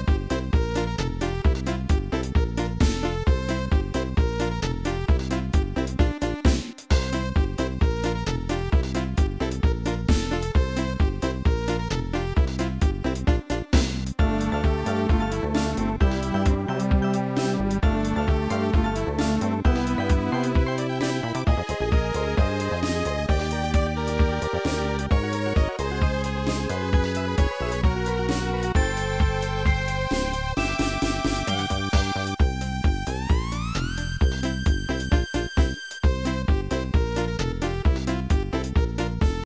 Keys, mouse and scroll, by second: 37.6 click, 39.3 click.